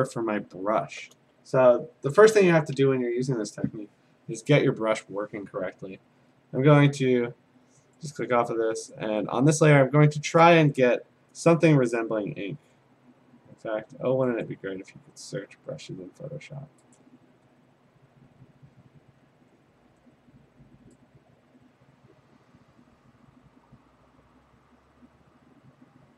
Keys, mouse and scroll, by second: 1.1 b, 1.4 middle click, 8.1 click, 9.0 click, 10.4 click, 11.5 right click, 12.3-13.4 scroll, 14.5 click, 17.0 click, 17.1-18.1 scroll, 18.4-20.2 scroll.